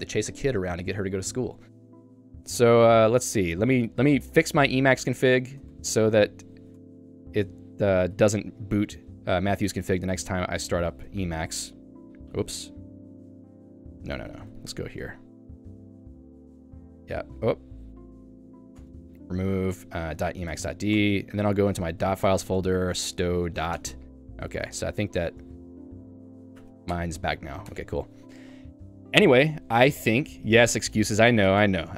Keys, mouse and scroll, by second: 2.5 a, 5.4 d, 6.8 Tab, 8.3 Return, 10.9 c, 10.9 space, 11.4 Return, 13.1-14.9 typing, 15.2 Return, 16.8 w, 17.1 Return, 18.4-19.7 typing, 18.8 Return, 20.5 Tab, 21.0 Return, 21.3-23.2 typing, 22.3 Tab, 22.6 Return, 23.9 Return, 24.9-26.2 typing, 25.3 Return, 26.6 Tab, 27.1 Return, 27.7 Escape, 29.8 click, 30.0 click, 30.1 Escape, 31.2 k, 31.5 Escape, 31.7 Escape.